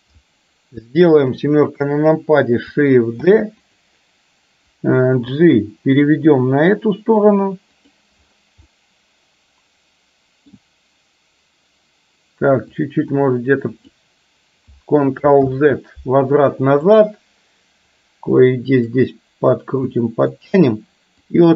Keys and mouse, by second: 1.3 KP_7, 3.3 shift+d, 5.3 g, 8.7-10.7 middle drag, 12.7 click, 13.1 click, 15.4 ctrl+z, 17.1-19.1 drag, 19.9 middle click, 21.2 click.